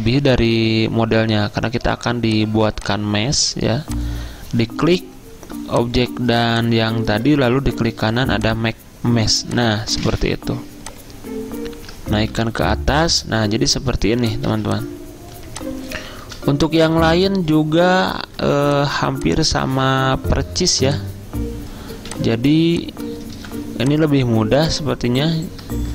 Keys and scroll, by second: 7.5 ctrl+z, 12.4 ctrl+], 14.6 z, 16.3 typing, 18.3 ctrl+z, 22.0 typing, 23.4 typing.